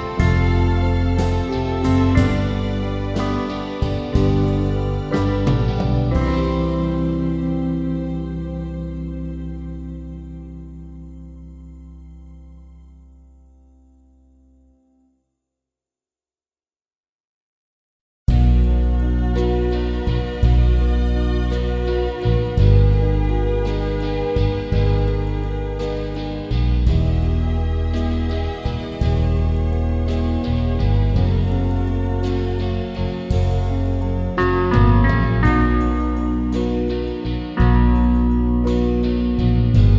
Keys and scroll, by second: 0.0-0.9 typing, 0.5 Return, 4.4 typing, 6.1-10.1 typing, 11.9-14.3 typing, 22.4 Up, 22.5 Up, 22.6 Up, 22.7 Up, 22.9 Up.